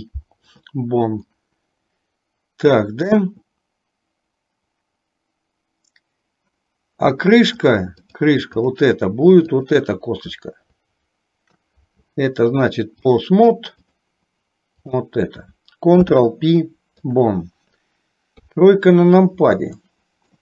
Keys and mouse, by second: 1.3-3.2 middle drag, 7.7 click, 8.7 click, 9.7 shift+click, 13.2 click, 16.1 ctrl+p, 18.5 KP_3, 19.8 shift+middle click.